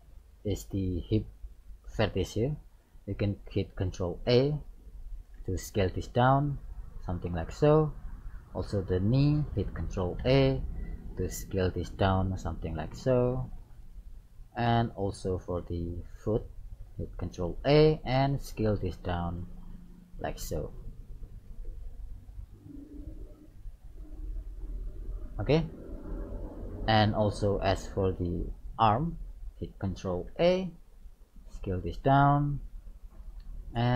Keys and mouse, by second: 1.7 right click, 5.1 ctrl+a, 8.4-10.1 right drag, 8.8-10.9 middle drag, 10.2 ctrl+a, 14.4 middle click, 15.3 right click, 17.3 ctrl+a, 20.8 right click, 21.9 ctrl+a, 24.3-26.1 drag, 25.5-28.2 middle drag, 27.9 right click, 30.4 ctrl+a, 33.3 right click.